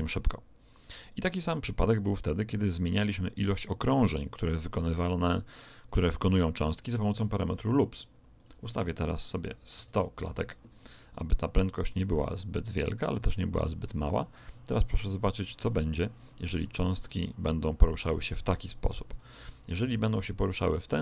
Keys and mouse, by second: 3.2 Escape, 8.3 click, 9.4 0, 12.1-14.5 right drag, 13.3 r, 16.9 click, 19.0 right click, 19.4 r.